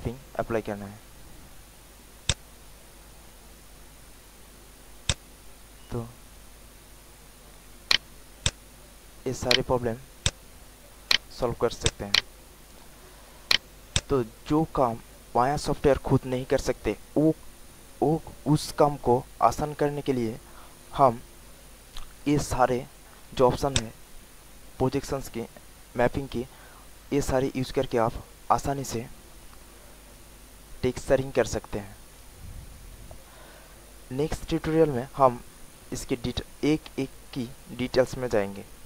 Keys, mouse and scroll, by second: 0.4 alt+middle click, 2.2-7.5 drag, 7.8 alt+right click, 8.4 click, 9.0 alt+middle click, 9.4 alt+right click, 10.2 alt+click, 10.7 alt+middle click, 11.1 alt+right click, 11.4 alt+middle click, 11.8 alt+click, 12.1 alt+right click, 12.4 alt+middle click, 13.1 alt+click, 13.4 alt+right click, 13.9 alt+click, 23.6 click.